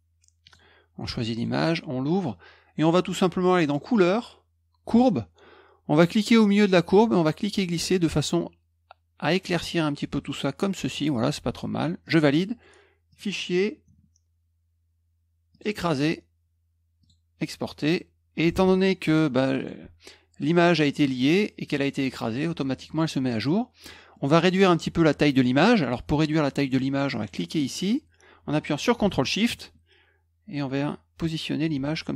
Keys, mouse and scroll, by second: 0.4 click, 1.3 click, 3.6 click, 4.8 click, 7.1-10.9 drag, 12.0 click, 13.1 click, 15.5 click, 17.0 click, 18.5 Tab, 19.5 click, 24.1 middle click, 27.7-31.6 drag.